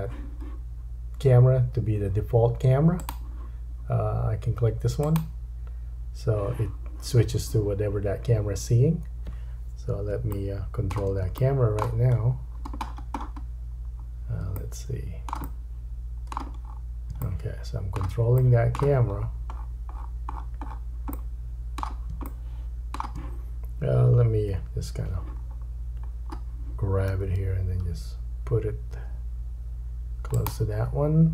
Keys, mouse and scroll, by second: 3.2-5.0 drag, 5.3-14.6 drag, 10.3 shift+middle click, 12.2-14.1 scroll down 9, 14.1-14.4 scroll up 2, 14.6 shift+middle click, 15.5 middle click, 16.7-17.1 scroll up 2, 17.3 shift+middle click, 19.1-21.1 scroll up 12, 21.1 middle click, 22.3 shift+middle click, 24.5 KP_7, 25.4-26.1 scroll down 5, 25.8-30.1 drag, 26.1-27.1 scroll up 1, 27.1 g, 30.1 right click, 30.4-31.3 drag.